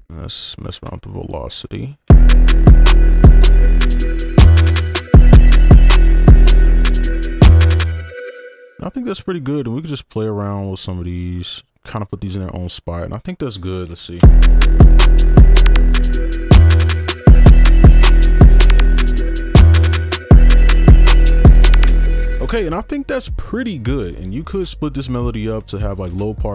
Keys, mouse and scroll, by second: 0.6 ctrl+a, 1.0 alt+scroll up 2, 1.8 alt+scroll up 1, 2.1 space, 3.2 alt+scroll down 1, 3.7 right click, 7.8 space, 14.2 space, 21.8 space.